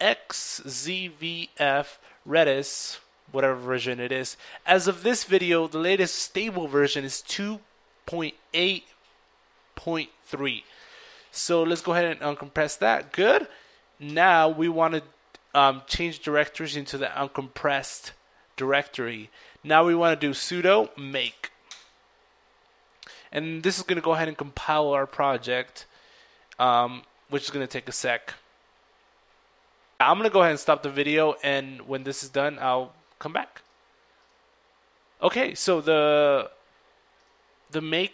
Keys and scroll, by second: 0.3-4.1 typing, 5.6 typing, 13.3-18.7 typing, 19.9-23.1 typing.